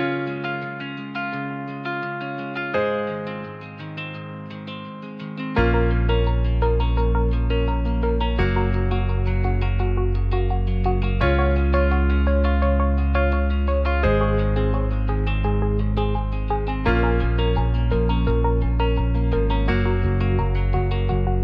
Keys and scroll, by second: 5.8 alt+z.